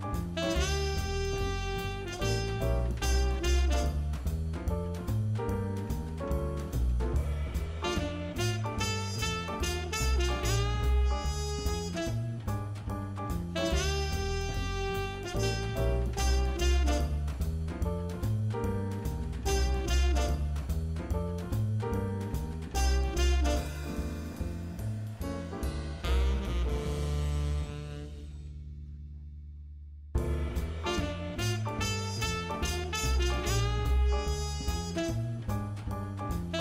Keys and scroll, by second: 0.5-2.2 typing, 2.4 super+z, 2.8 super+z, 3.9 super+z, 5.0 super+z, 5.3 2, 5.3 2, 5.8 super+z, 7.0 super+z, 9.5 super+z, 10.3 super+z, 16.0 super+z, 16.4 super+z, 16.8 super+z, 17.2 super+z, 17.9 super+z, 18.4 super+z, 20.1 super+z, 21.8-23.0 typing, 24.8 super+z, 25.6 super+z, 30.7 super+z, 33.7 super+z, 35.0 Up, 35.1 Up.